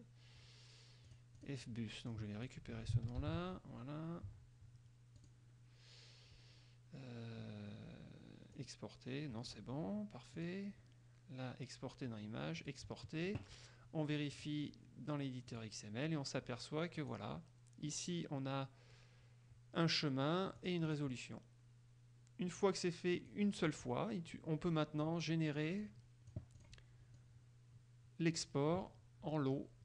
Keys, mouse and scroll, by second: 1.3 click, 2.3 click, 3.4 ctrl+c, 5.4 click, 8.7 click, 10.5 click, 12.7 click, 14.5 click, 15.7 click, 17.1 click, 20.7 click, 23.3 click, 23.8 click, 26.0 click, 27.4-28.7 drag.